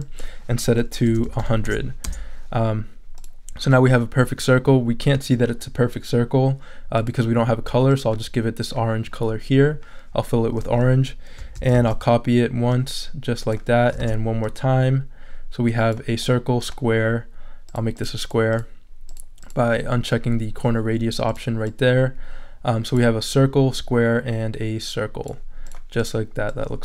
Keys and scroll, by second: 0.8-1.7 typing, 2.0 Return, 11.5 super+c, 11.7 super+v, 14.0 super+v.